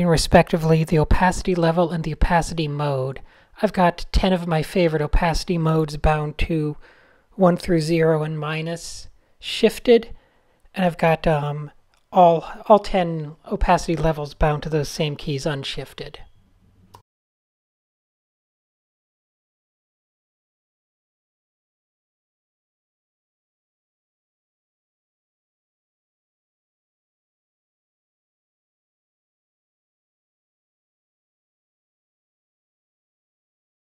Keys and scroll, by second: 0.8 shift+super+a, 0.8 v, 1.2 shift+Down, 1.3 shift+Down, 1.5 shift+Left, 1.6 shift+Left, 1.7 shift+Right, 1.8 shift+Left, 2.4 super+0, 2.7 Tab, 3.6 Tab, 4.7 Tab, 5.6 super+h, 5.8 super+h, 7.4 shift+z, 8.5 a, 16.1-16.8 typing, 16.9 alt+super+f, 19.0-23.1 typing, 26.9-27.5 typing, 28.9-30.5 typing, 31.2 super+z, 31.5 `, 33.1 shift+z.